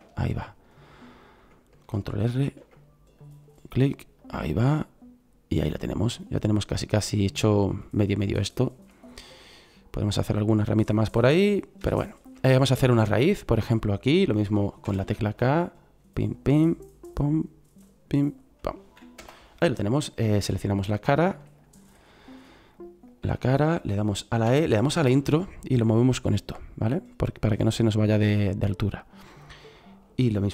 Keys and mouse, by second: 2.4 ctrl+r, 6.4-6.9 middle drag, 8.5-9.5 middle drag, 14.8 k, 20.8 right click, 24.4 e.